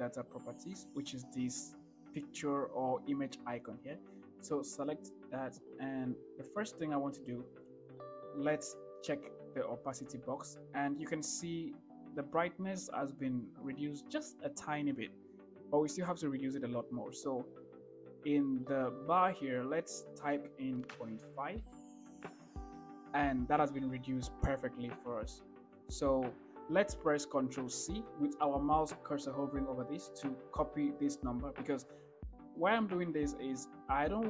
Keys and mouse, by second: 5.2 click, 9.3 click, 20.2-21.9 drag, 28.1 ctrl+c.